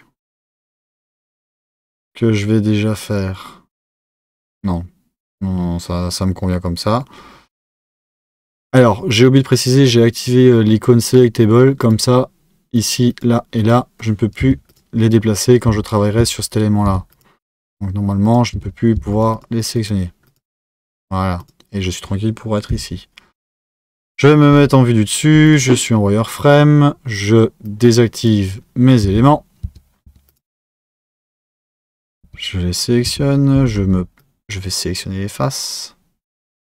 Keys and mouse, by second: 9.5-11.9 drag, 12.7 click, 13.1 click, 13.6 click, 14.4 Tab, 14.7 click, 15.6 Tab, 16.2 Tab, 17.2 click, 17.6 click, 18.2 click, 18.6 Tab, 18.9 Tab, 19.1 click, 19.3 drag, 19.7 click, 20.2 click, 20.5 click, 21.4 click, 22.7 KP_7, 24.5 z, 25.5 click, 27.6-29.1 drag, 29.1 Tab, 29.6 Tab, 30.3 click, 30.6 Tab, 30.9 click, 32.2 Tab, 33.1 1, 34.2 click.